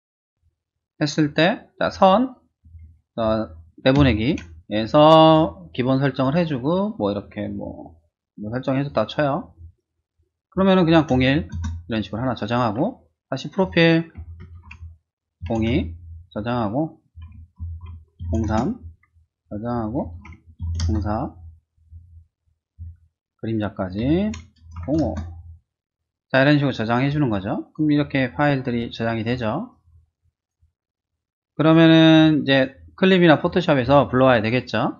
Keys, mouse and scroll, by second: 3.8 ctrl+shift+a, 5.2 click, 6.7 click, 7.6 click, 8.7 click, 9.5 click, 10.1 click, 11.1 typing, 11.5 Return, 13.5 click, 14.2 ctrl+shift+a, 15.4 typing, 15.7 Return, 17.4 ctrl+shift+a, 18.2 typing, 18.5 Return, 19.5 click, 19.8 ctrl+shift+a, 20.6 typing, 20.8 Return, 21.8 click, 22.8 ctrl+shift+a, 24.8 typing, 25.0 Return, 27.6 click, 28.2 click, 29.2 click, 29.7 click, 30.4 click, 32.5 click.